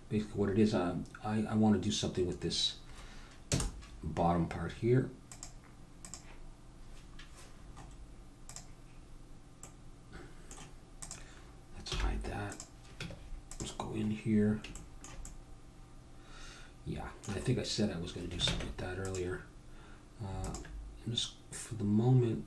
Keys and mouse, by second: 3.4 KP_0, 7.7 middle click, 8.5-10.2 drag, 10.4 middle click, 11.0-12.5 drag, 11.9 h, 13.0 Tab, 14.4-16.3 middle drag, 16.7 middle click, 17.5-18.5 middle drag, 18.5 ctrl+Tab, 21.8-22.4 drag.